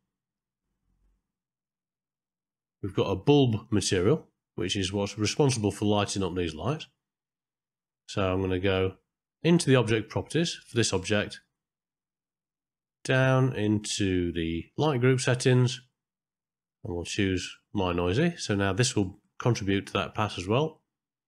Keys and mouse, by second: 1.5 click, 2.7 middle click, 11.7-14.0 middle drag, 15.3 middle click, 16.6-18.0 drag, 19.4 ctrl+middle click, 20.2-20.9 middle drag.